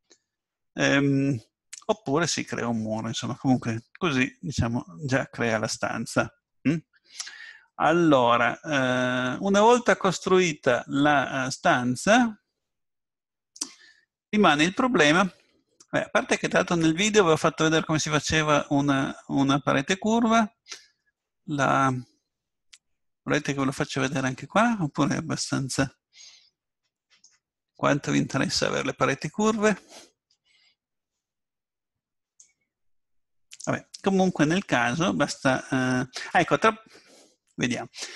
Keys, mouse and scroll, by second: 2.9-4.9 middle drag, 6.9-9.5 middle drag, 21.0-22.8 middle drag, 28.1-32.3 middle drag, 32.4-34.3 drag.